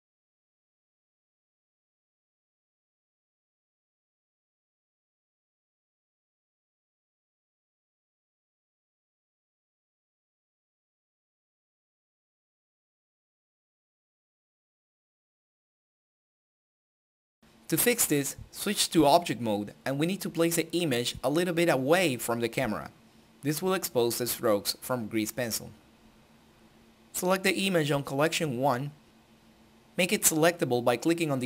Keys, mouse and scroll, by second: 2.1 click, 5.6-8.1 drag, 10.8 click, 14.1 click, 14.8 ctrl+click, 16.0 typing, 16.6 Return, 17.6 n, 19.2-20.4 right drag, 20.5 click, 21.7 right drag, 22.5 shift+middle drag, 22.7 scroll down 1, 25.1 click, 26.9-29.0 middle drag, 29.0 click, 29.6-30.1 scroll up 1, 30.3-31.4 drag.